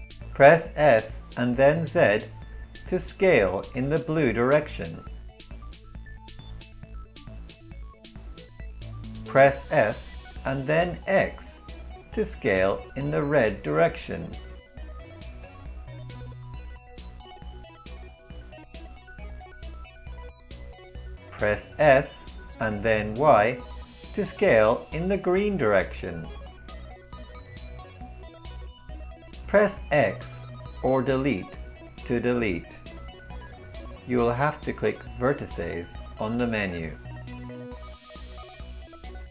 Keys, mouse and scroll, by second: 0.5 s, 6.0 s, 9.4 s, 19.6 s, 33.3 x.